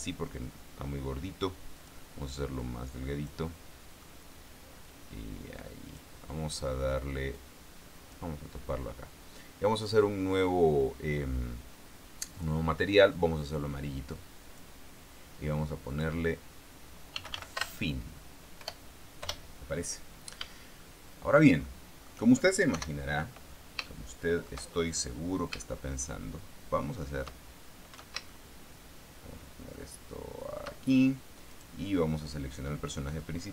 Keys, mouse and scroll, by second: 2.1 click, 2.9 click, 3.8 middle click, 5.2-6.5 drag, 6.8 middle click, 7.7 click, 10.2 click, 12.7 click, 13.5-15.1 drag, 16.2 click, 17.5 f, 17.6 i, 17.7 n, 17.9 \, 19.0 BackSpace, 20.1 Return, 21.2 shift+middle click, 23.1 KP_0, 24.2 shift+middle click, 25.4-25.7 scroll up 1, 25.9-27.7 shift+middle drag, 28.6-31.1 shift+middle drag, 31.8 middle click, 32.0 right click.